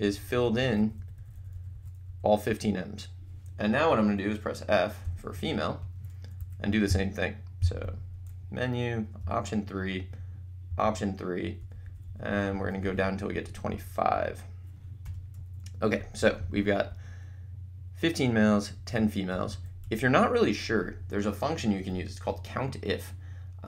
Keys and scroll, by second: 5.0 f, 5.8 Return, 6.4 Up, 7.8 Menu, 9.5 3, 11.6 Down, 15.0 Return, 15.8 Right, 16.4 Left, 16.9 Up, 19.3 Down, 19.8 Right.